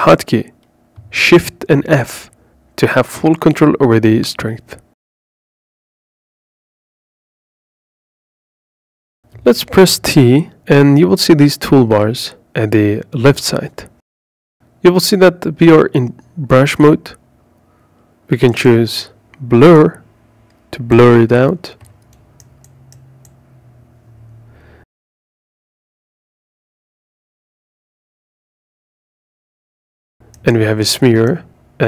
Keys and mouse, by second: 0.5 shift+f, 3.9 click, 6.3 shift+f, 8.3 ctrl+click, 9.1 t, 9.7 t, 10.7 t, 11.0 t, 16.4 click, 21.6 click, 25.6-27.6 drag, 30.5 click, 31.2-31.8 drag.